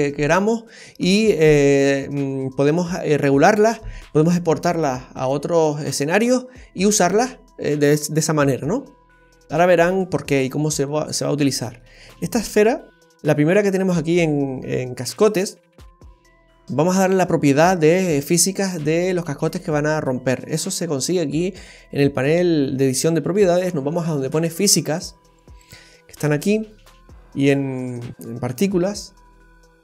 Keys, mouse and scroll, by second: 9.8-10.4 scroll up 2, 10.4 scroll down 3, 10.9 middle click, 12.7-13.6 scroll up 2, 15.1 click, 18.2-18.8 scroll down 2, 24.9 click, 25.6 click.